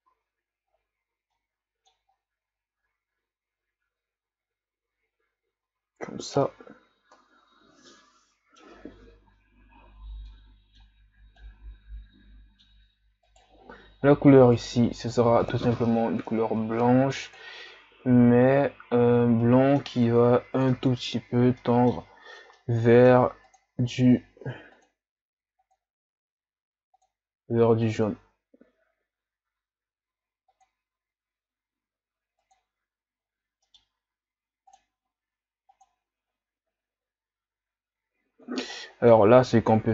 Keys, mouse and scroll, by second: 0.3 a, 0.8-1.4 scroll down 4, 1.4 middle click, 2.2-4.9 scroll up 3, 4.9-5.8 scroll up 1, 5.8-6.2 scroll down 4, 6.5-10.3 middle drag, 11.5-13.4 middle drag, 13.4 right click, 15.6-18.7 drag, 19.1-19.5 scroll down 3, 19.5 middle click, 20.4-21.4 scroll up 6, 21.0 middle click, 21.6-23.2 middle drag, 24.8 click, 25.7 click, 26.9 click, 33.7-35.1 middle drag, 35.8-37.9 drag.